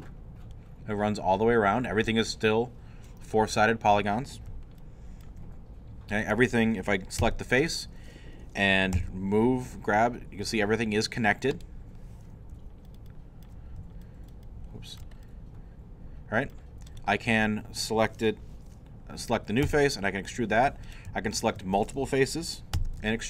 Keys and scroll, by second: 7.2 3, 8.9 g, 19.6 e, 22.7 e.